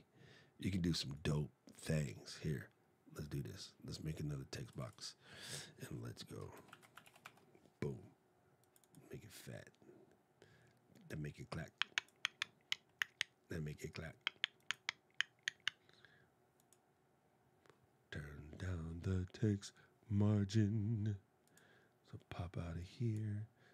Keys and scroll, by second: 5.9-7.4 typing.